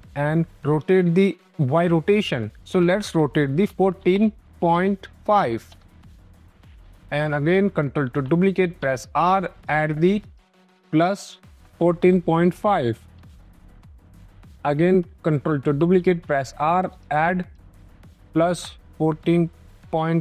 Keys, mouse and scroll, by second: 0.6 click, 2.5-5.2 typing, 6.2 click, 7.9 ctrl+d, 8.7 r, 9.5 click, 11.6-13.9 typing, 13.1 Return, 13.6 scroll, 15.4 ctrl+d, 15.9 r, 16.7 click, 17.2 click, 18.8-20.2 typing.